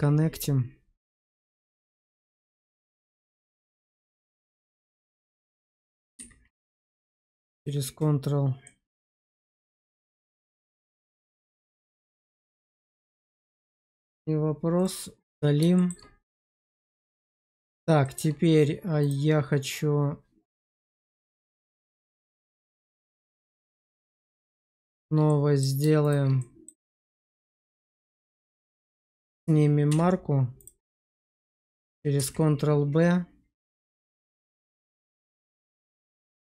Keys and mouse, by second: 1.1 Tab, 1.5 middle click, 2.5 middle click, 3.2 shift+middle click, 3.9 Tab, 4.4 middle click, 5.2 Tab, 6.0 q, 8.5 middle click, 11.0-14.7 drag, 15.7 shift+middle click, 16.5 shift+middle click, 17.2 middle click, 17.9 shift+middle click, 23.0 Tab, 23.6 click, 24.0 middle click, 24.8 shift+click, 25.2 middle click, 26.3 middle click, 27.1 shift+click, 27.7 middle click, 29.8 q, 30.9 shift+middle click, 32.1 ctrl+b, 36.3 click.